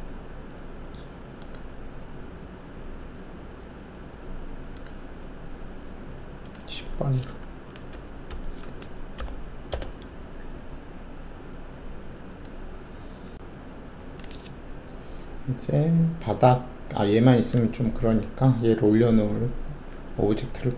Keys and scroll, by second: 7.9 Delete, 8.2 Delete, 8.6-9.1 typing, 9.7 Return.